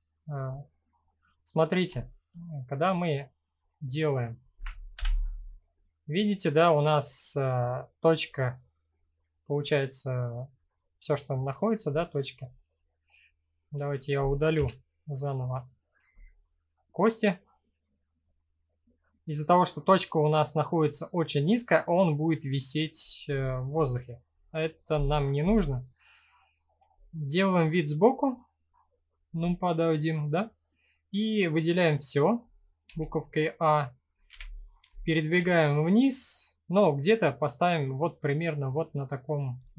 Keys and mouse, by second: 1.5 click, 1.9-2.7 right drag, 3.3-3.9 middle drag, 4.5 KP_1, 11.5 click, 12.6-13.1 middle drag, 14.1 Delete, 14.1 End, 16.3 middle click, 17.9-18.4 middle drag, 18.9 click, 25.0 KP_1, 32.4 a, 33.8 g, 34.9 z, 39.2 click.